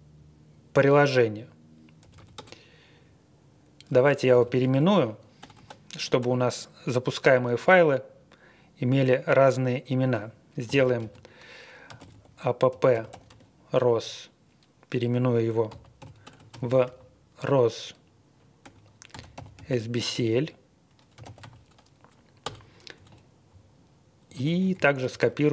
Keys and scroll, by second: 2.0-2.3 typing, 4.1-6.2 typing, 10.4-13.6 typing, 15.7-17.3 typing, 18.3-21.9 typing, 22.4 Return, 22.9 Page_Up, 23.5-23.8 Home, 23.8-24.2 Left, 24.4 Right, 24.6 Right, 24.7 Right, 25.0 ctrl+w, 25.2 ctrl+w, 25.4 ctrl+w.